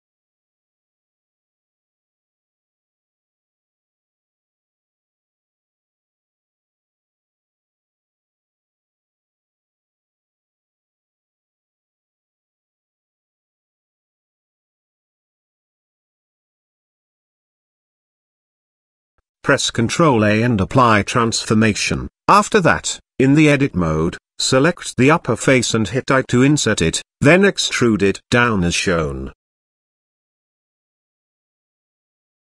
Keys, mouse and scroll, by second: 1.6 click, 2.3 g, 3.8 middle click, 4.8 shift+middle click, 5.2 middle click, 5.9 s, 7.9 g, 9.4 s, 10.6-11.4 middle drag, 11.7 g, 13.6 scroll up 1, 13.6-14.1 middle drag, 14.6 s, 16.9-17.4 middle drag, 17.6 shift+middle click, 17.8-18.2 middle drag, 18.8-19.1 shift+middle drag, 21.1 ctrl+a, 22.4 Tab, 23.4 click, 23.8 click, 24.8 i, 27.1 e, 30.5 middle click, 31.3 z, 31.7 middle click.